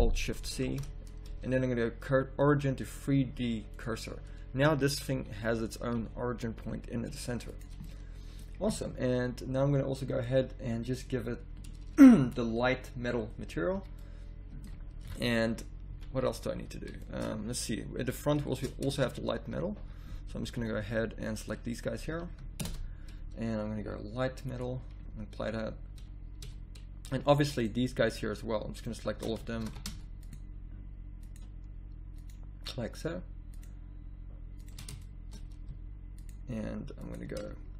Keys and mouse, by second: 0.6 ctrl+alt+shift+c, 5.2 r, 7.8 middle click, 13.7 a, 15.1 KP_1, 15.9 z, 16.5 z, 17.3 z, 19.0 Tab, 19.4 z, 19.8 z, 20.4 b, 22.6 ctrl+KP_Add, 25.9 z, 26.4 a, 29.6 ctrl+z, 35.0 middle click, 35.4-37.3 drag.